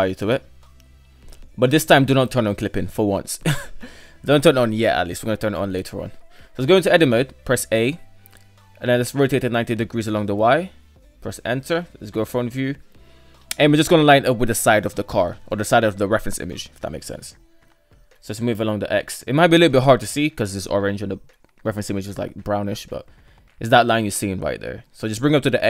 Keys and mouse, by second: 4.5 middle click, 5.7 Tab, 6.7 a, 7.9 r, 10.9 Tab, 10.9 KP_1, 11.5 Tab, 12.6-12.9 shift+middle drag, 13.8 g, 15.9 shift+middle click, 16.1 shift+middle click, 16.9 shift+middle click, 17.6 g, 20.5-20.9 shift+middle drag, 21.7 shift+middle click, 22.9 g, 25.1 Tab.